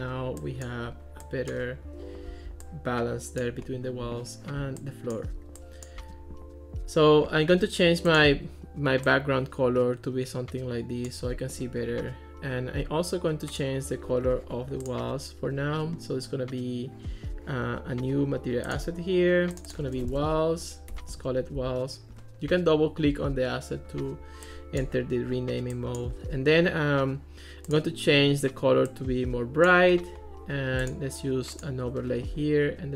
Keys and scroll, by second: 19.9-22.1 typing, 22.1 Return.